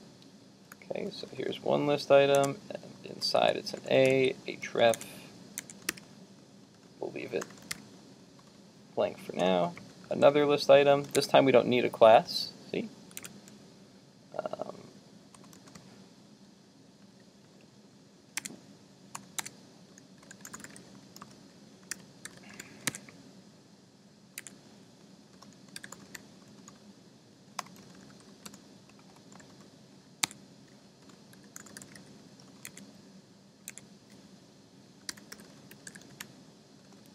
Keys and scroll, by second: 5.0 super+Tab, 5.6 super+Tab, 11.2 super+Tab, 13.2 super+Tab, 22.9 super+Tab, 24.5 super+Tab, 32.7 super+Tab, 33.7 super+Tab.